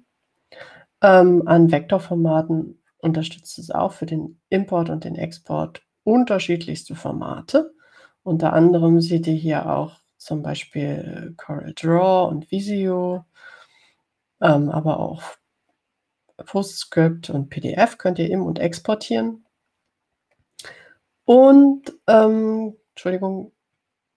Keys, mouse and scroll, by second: 20.7-21.9 scroll down 4, 22.7 scroll up 2.